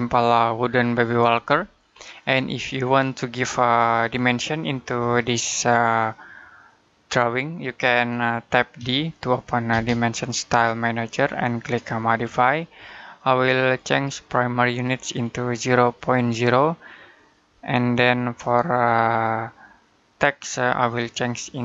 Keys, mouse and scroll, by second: 1.8-3.2 scroll up 1, 3.2 middle click, 8.6 d, 9.5 space, 11.9 click, 20.7 click.